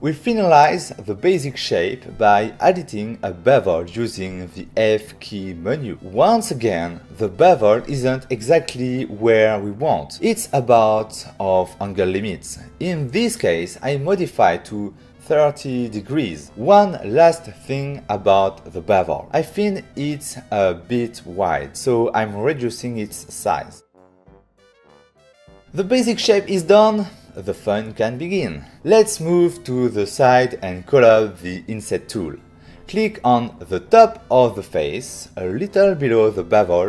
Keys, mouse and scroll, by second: 0.4 click, 0.8 f, 2.5 click, 11.4 click, 11.8 f, 14.4 click, 15.8 typing, 20.2 Escape, 21.4-21.9 typing, 21.6 click, 21.9 Return, 23.4 f, 24.4 click, 24.5 click, 24.6 click, 24.8 /, 25.2 2, 32.0 middle click, 32.1 ctrl+middle click, 32.5 f, 34.2 click, 35.8 middle click.